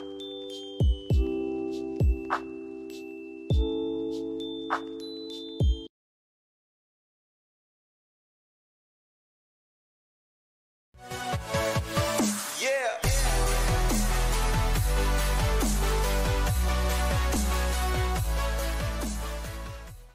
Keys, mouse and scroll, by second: 2.3 F11, 4.6 click.